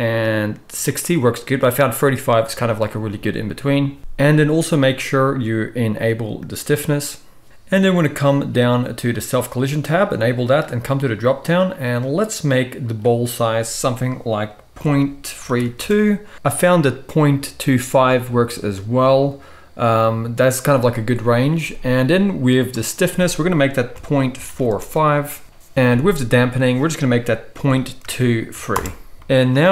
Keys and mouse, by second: 9.1 click, 10.5-29.7 middle drag.